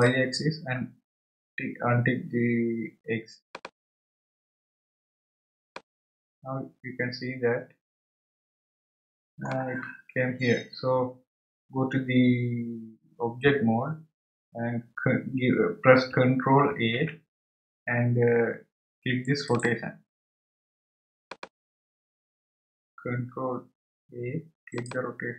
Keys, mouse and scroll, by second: 3.5 click, 5.7-8.7 middle drag, 14.4 Tab, 21.2 click.